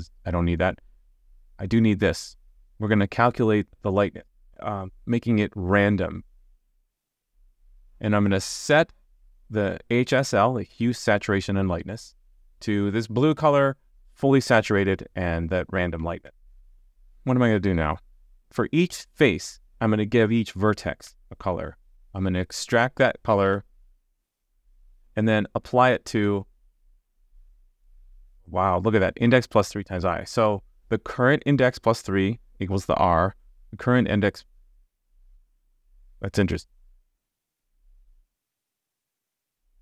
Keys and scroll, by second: 6.8 super+z, 16.2 super+z, 21.0 super+z, 23.4 super+z, 33.0 super+z, 37.9 super+z.